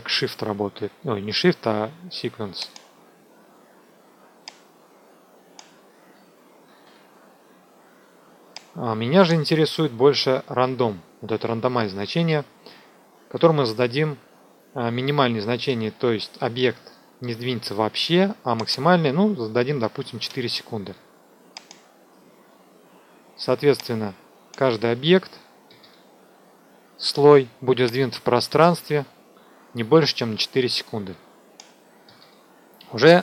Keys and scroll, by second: 6.6 ctrl+z, 20.1 4.